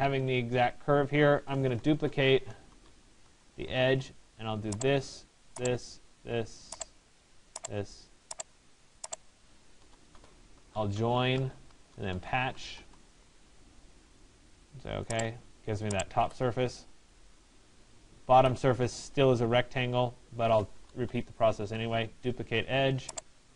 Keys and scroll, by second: 2.7 e, 9.4 Return, 21.2 Return.